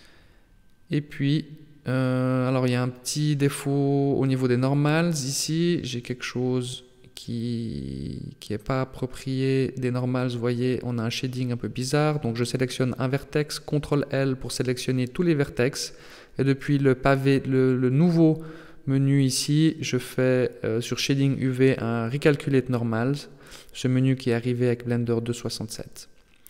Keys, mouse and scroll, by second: 0.2 middle click, 3.7 KP_7, 4.4-4.9 scroll down 3, 4.9 z, 6.6 middle click, 9.6 z, 10.4 right click, 12.2 ctrl+l, 13.1 scroll down 1, 13.2 middle click, 14.3 middle click, 15.0-15.4 scroll up 2, 16.6 click, 17.8 click, 20.0 middle click, 21.1 KP_7, 22.1 shift+middle click, 23.3 right click, 24.3 ctrl+l, 24.6 h.